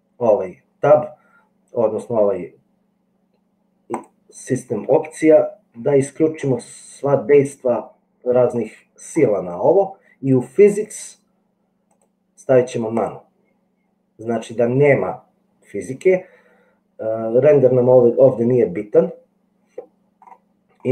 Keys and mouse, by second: 3.9-7.9 drag, 11.9-13.4 drag.